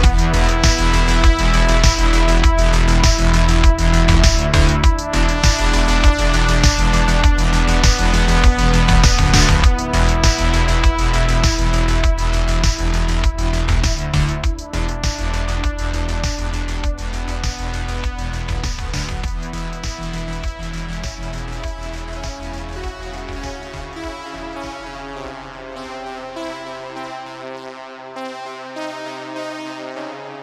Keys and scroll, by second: 0.5 super+r, 1.7 super+r, 2.7 3, 7.2 Tab, 15.0 Tab, 19.3 x, 21.1 Tab.